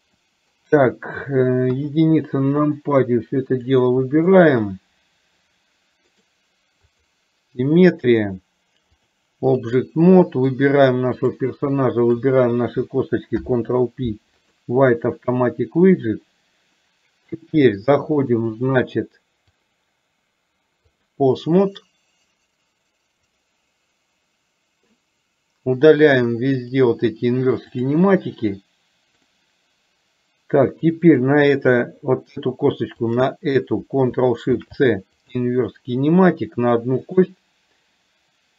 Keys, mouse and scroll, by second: 0.3 middle click, 1.8 KP_1, 2.8-3.8 drag, 4.5 click, 9.0 click, 10.3 middle click, 12.3 shift+click, 13.4 ctrl+p, 18.3 click, 19.7-21.2 drag, 23.4 click, 26.7 click, 27.8 click, 33.0 shift+click, 34.7 ctrl+shift+c, 37.2 click.